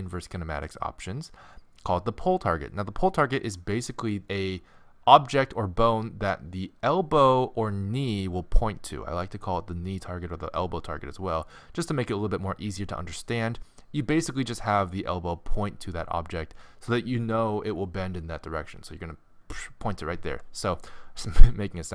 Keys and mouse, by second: 0.0-1.0 right drag, 0.6-4.9 drag.